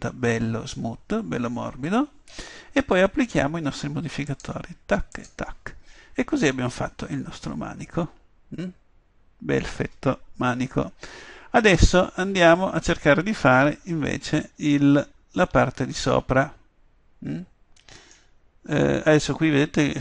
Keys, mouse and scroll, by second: 4.3-7.0 drag, 7.0-8.8 middle drag, 10.7 KP_7, 14.2 middle click.